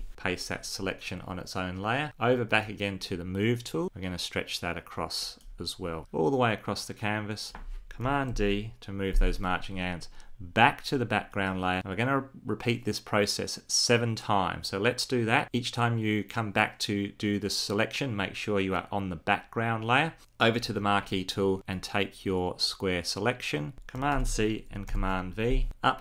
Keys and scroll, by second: 7.8 super+d, 23.7 super+c, 24.6 super+v.